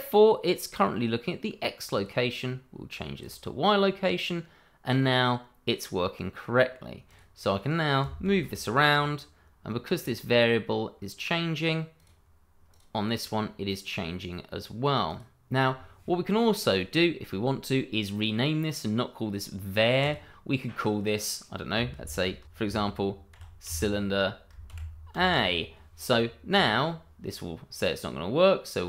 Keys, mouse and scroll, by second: 1.9 click, 7.0 click, 8.3 g, 12.1 click, 13.8 right click, 15.2 click, 20.0 click, 22.4 BackSpace, 23.3 shift+c, 23.6 y, 24.7 shift+-, 25.1 shift+a, 26.5 click.